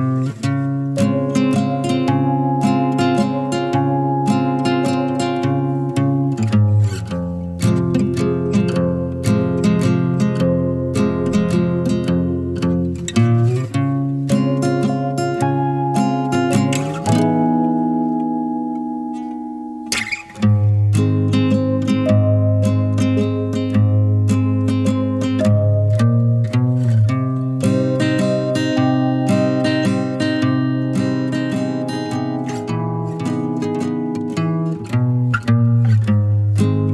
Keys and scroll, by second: 35.4 0.